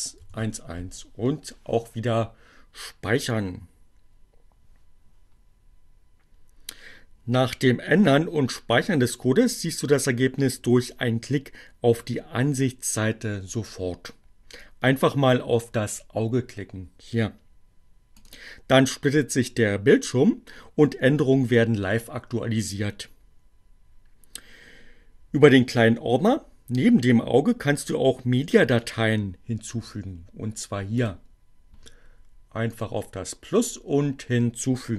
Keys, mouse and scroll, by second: 3.2 click, 16.8-18.3 drag, 30.7 click, 32.6-33.0 drag, 34.5-34.9 drag.